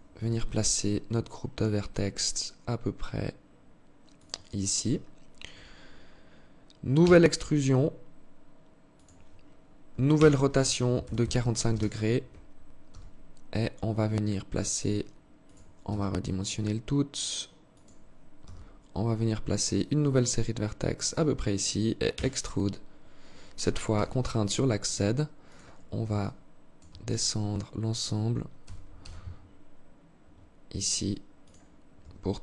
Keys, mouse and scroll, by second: 6.3 e, 9.4 r, 12.2 g, 15.2 s, 17.7 g, 21.4 e, 25.5 alt+shift+click, 28.0 g, 31.3 Tab, 31.9 Tab.